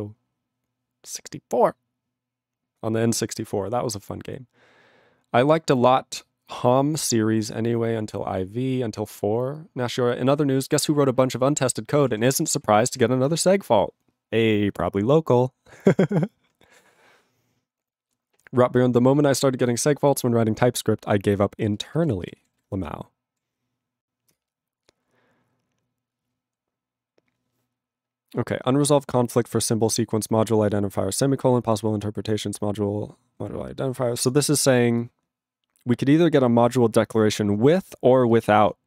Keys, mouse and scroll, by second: 12.2 ctrl+a, 12.3 ctrl+space, 12.4 ctrl+e, 12.4 ctrl+g, 13.0 ctrl+s, 17.0 ctrl+s, 21.7 ctrl+space, 22.1 ctrl+alt+b, 22.3 ctrl+g, 22.6 ctrl+s.